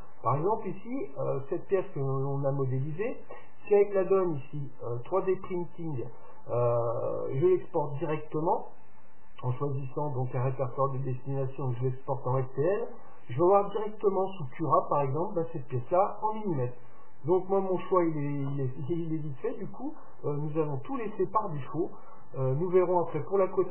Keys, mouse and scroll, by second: 1.8-3.8 middle drag, 8.5-10.4 drag.